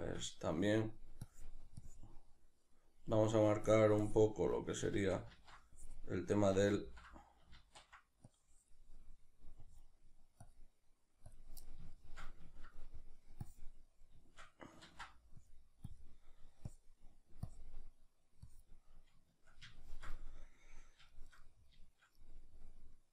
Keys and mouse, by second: 1.3-11.6 drag, 4.9 ctrl+z, 6.6 ctrl+z, 11.6-13.4 middle drag, 13.4 click, 13.8-15.4 middle drag, 14.9 ctrl+z, 15.4-19.7 drag, 19.7-23.1 shift+middle drag.